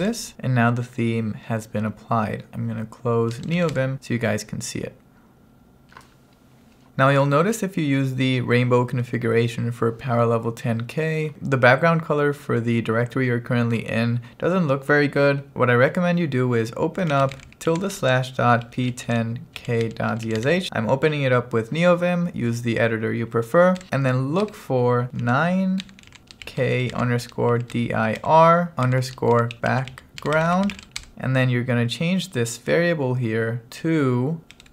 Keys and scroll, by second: 0.1 Return, 3.2-4.1 typing, 16.8-21.2 typing, 23.9-31.6 typing, 33.7-34.7 typing.